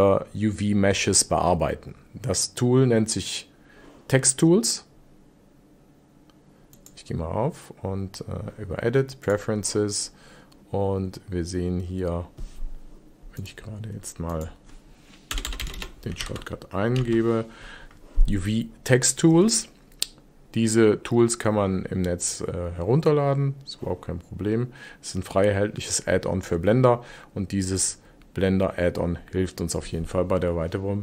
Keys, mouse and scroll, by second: 6.7-9.7 drag.